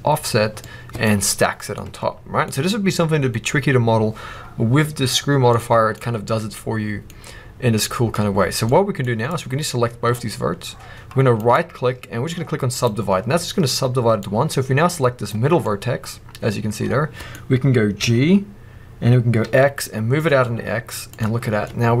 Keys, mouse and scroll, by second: 0.4 scroll down 2, 2.4-5.4 scroll up 2, 6.4 scroll up 2, 9.1 click, 10.3-11.2 scroll up 2, 11.2-14.1 right drag, 14.1 click, 15.5-21.0 middle drag, 17.9 g, 21.1 click, 21.2-21.6 scroll down 2, 21.6-22.0 middle drag.